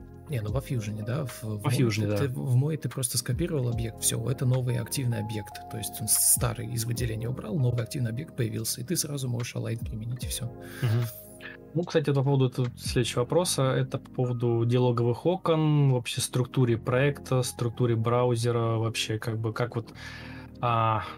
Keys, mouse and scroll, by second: 12.1 Delete.